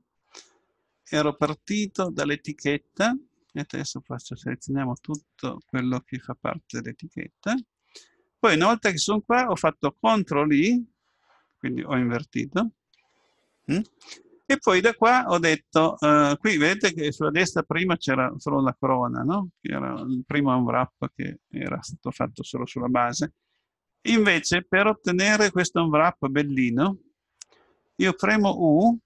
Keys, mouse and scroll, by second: 2.1-6.9 drag, 12.9 ctrl+i.